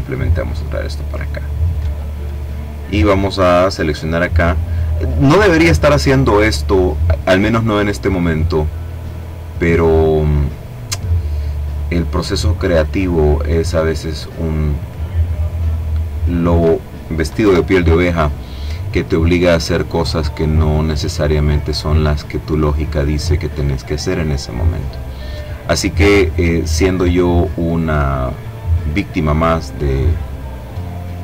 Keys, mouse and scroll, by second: 0.2-1.3 drag, 2.2 click, 3.1 click, 4.8 click, 6.4-10.3 drag, 11.2-14.3 drag, 15.5 click, 16.4 Delete, 18.7-20.5 drag, 21.2-22.5 drag, 22.7-24.6 drag, 25.1-28.4 drag, 28.6-31.0 drag.